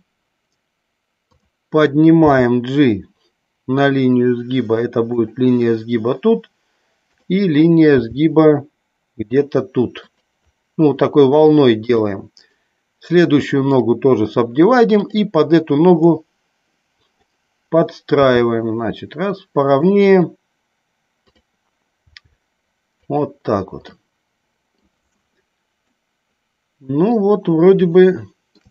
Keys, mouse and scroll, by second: 5.1 click, 7.8 g, 10.0 click, 11.8 click, 14.9 click, 16.1-17.2 drag, 19.6 click, 21.3 click, 22.9 click, 23.8 middle click, 25.9-27.2 middle drag, 27.9 shift+middle click.